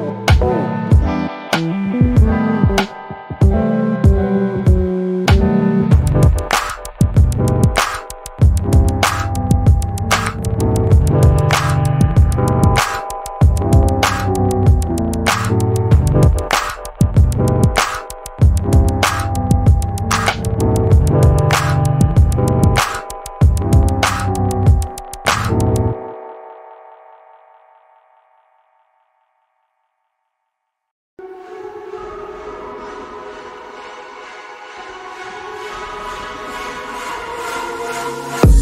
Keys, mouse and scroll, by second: 1.5 click, 1.5 double click, 1.8 middle click, 2.4 alt+click, 5.2 middle click, 6.9 right click, 7.4 click, 11.4 Escape, 13.3 click, 14.4 Escape, 14.8 click, 16.0 Escape, 16.8 click, 17.9 Escape, 23.6 alt+middle click, 24.1-24.4 alt+scroll up 2, 24.8 alt+middle click, 26.2 right click, 26.7 click.